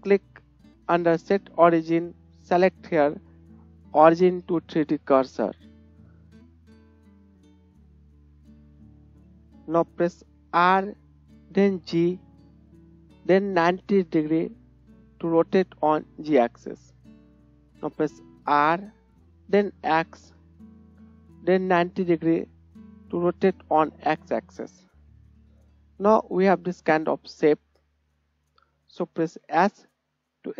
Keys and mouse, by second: 5.3 right click, 8.2 ctrl+click, 10.7 r, 18.5 r, 24.4 right click, 24.8 KP_1, 24.9-26.1 middle drag, 26.1 right click, 26.2-27.9 middle drag, 27.9 right click, 28.2-29.5 middle drag, 29.5-30.5 right drag, 29.5 s.